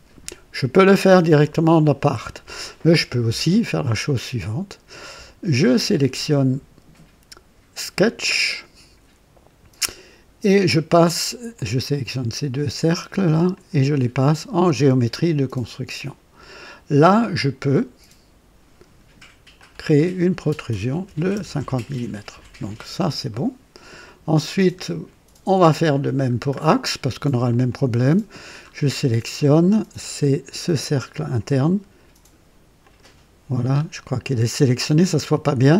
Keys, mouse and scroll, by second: 7.9 click, 9.7 scroll up 2, 11.5 click, 12.6 click, 13.5 click, 14.7 click, 15.9 click, 19.5 click, 21.0 KP_5, 21.2 KP_0, 21.5 KP_Enter, 22.8 scroll down 1, 23.2-23.9 right drag, 24.5-24.8 scroll down 1, 25.8 click, 26.4-27.4 scroll down 2, 27.4 click, 28.5-28.9 scroll up 1, 29.3 right click, 31.0 click, 32.7 click, 33.6 scroll up 1.